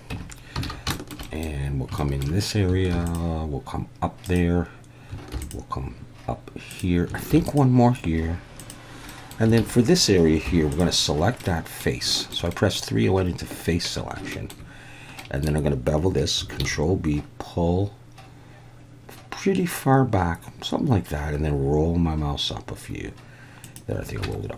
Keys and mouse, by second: 0.1 Tab, 0.6 alt+a, 0.9 shift+middle click, 1.3 middle click, 2.0 shift+middle click, 2.9 ctrl+r, 4.2 click, 5.3 ctrl+r, 6.7 click, 7.3 ctrl+r, 8.6 click, 9.2 middle click, 9.6 alt+a, 10.5 3, 10.7 click, 11.4 middle click, 12.1 shift+middle click, 12.5 middle click, 14.3 shift+middle click, 15.2 middle click, 16.6 ctrl+b, 23.6 click, 24.2 Tab.